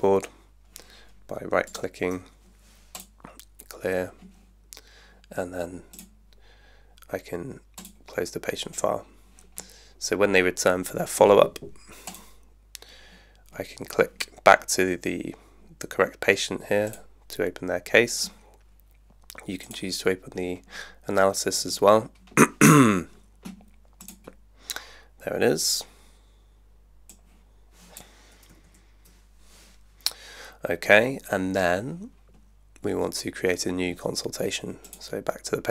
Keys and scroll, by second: 28.6 super+1.